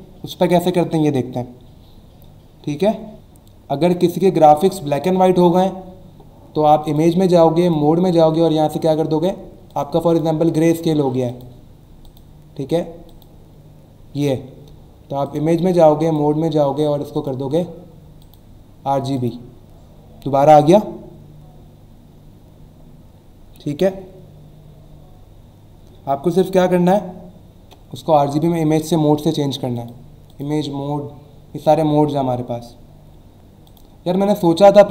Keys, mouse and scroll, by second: 6.8 click, 7.6 click, 9.7 click, 10.1 click, 11.3 click, 12.0 click, 13.1 click, 15.2 click, 16.0 click, 17.1 click, 18.2 click, 19.2 click, 29.7 click, 30.3 click, 33.7 click.